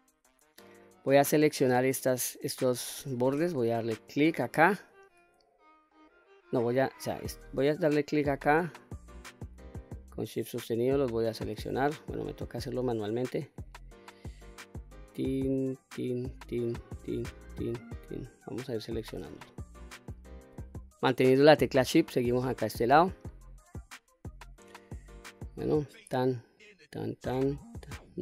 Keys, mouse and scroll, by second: 3.0 2, 4.1 click, 7.3 click, 8.1 middle click, 10.0 shift+click, 10.9 shift+click, 11.5 shift+click, 11.9 shift+click, 12.4 shift+click, 13.0 shift+click, 13.6 shift+click, 15.0 shift+click, 15.8 shift+click, 16.3 shift+click, 16.8 shift+click, 17.3 shift+click, 17.8 shift+click, 18.3 shift+click, 18.8 shift+click, 19.5-21.2 middle drag, 22.0 shift+click, 23.0 shift+click, 23.9 shift+click, 24.4 shift+click, 24.9 shift+click, 25.9 shift+click, 26.6 shift+click, 27.1 shift+click, 27.6 shift+click, 28.1 shift+click.